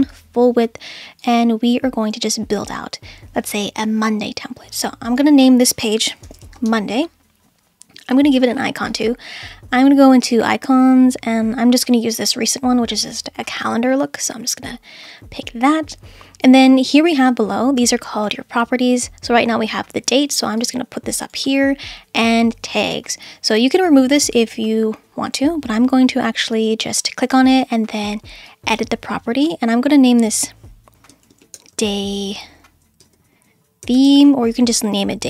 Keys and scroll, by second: 5.9-7.1 typing, 30.9 Left, 31.0-32.0 typing, 32.1 Right, 33.0-34.6 typing.